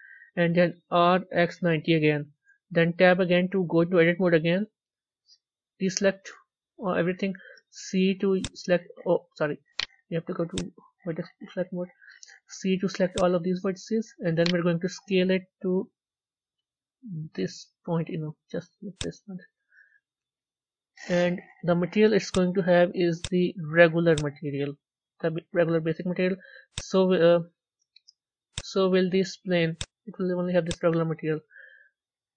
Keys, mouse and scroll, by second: 0.8 r, 3.1 Tab, 4.5 KP_1, 5.1-5.7 scroll down 3, 6.0 a, 8.2 c, 10.4-11.4 drag, 11.4 a, 13.0 c, 15.5 s, 24.1-25.8 drag, 25.8 middle click, 26.7 click, 27.6 Tab, 28.5 click, 30.6-31.3 drag, 31.3-31.9 middle drag, 31.9-32.3 scroll down 4.